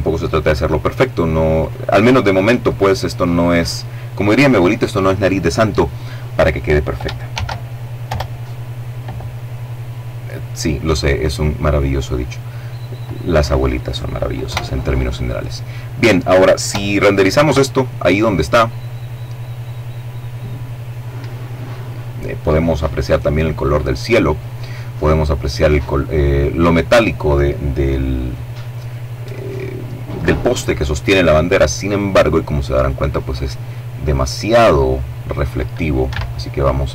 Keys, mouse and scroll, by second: 0.4 right click, 1.4 right click, 6.1 shift+d, 6.9 Return, 7.9-11.0 drag, 11.5-11.8 scroll down 1, 11.8 middle click, 13.3 KP_0, 16.3 F12, 34.8 Escape, 35.8 right click.